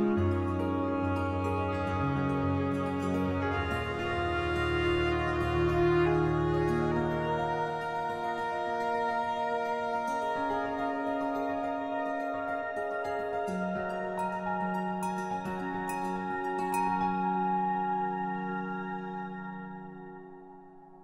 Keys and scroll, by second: 11.0 b.